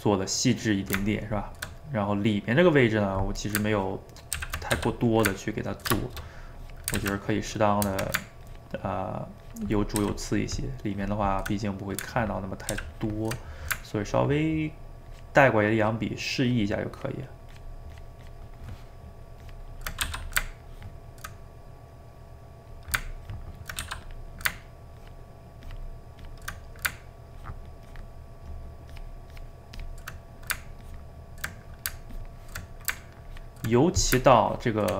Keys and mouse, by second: 3.8 ctrl+click, 4.4 ctrl+z, 4.7 f, 5.4-6.5 ctrl+middle drag, 6.5 click, 7.0 ctrl+z, 7.3-10.0 drag, 10.0 ctrl+z, 10.3-11.6 ctrl+drag, 11.6 middle click, 12.1 ctrl+click, 12.8 ctrl+z, 12.9 ctrl+click, 13.4 middle click, 14.0-20.1 ctrl+drag, 20.1 f, 20.6 ctrl+click, 21.4-23.3 middle drag, 23.3 ctrl+click, 23.8 f, 24.2 middle click, 25.0-26.6 ctrl+drag, 26.6 middle click, 27.4-30.2 ctrl+drag, 30.2 middle click, 30.8 ctrl+click, 31.6 middle click, 32.1 ctrl+click, 32.7 middle click, 33.2 ctrl+click, 33.8 middle click, 34.5-34.9 ctrl+drag.